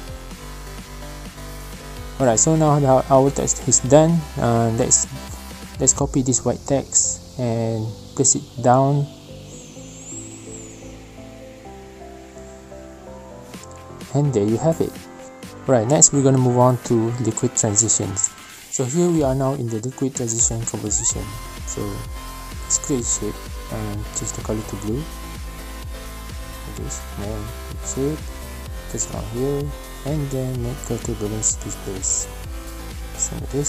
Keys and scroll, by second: 4.6 ctrl+alt+c, 5.7 ctrl+v, 12.1 space, 13.2 space, 16.5 space, 18.5 space, 18.7 Delete, 28.2 v.